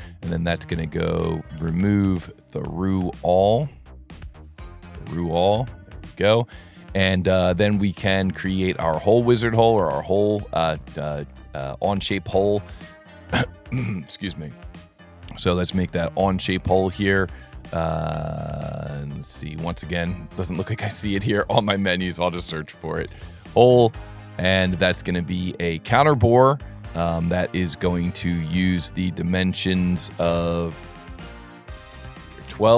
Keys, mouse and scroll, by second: 1.5 click, 2.2 click, 4.9 click, 5.8 click, 6.5 scroll up 1, 6.7-7.6 middle drag, 7.9 middle drag, 8.6 middle click, 9.1-9.7 scroll up 3, 9.8-10.2 ctrl+middle drag, 14.0 click, 14.6 click, 16.1 click, 16.8 click, 21.4 click, 23.1 e, 24.5 click, 30.3 click.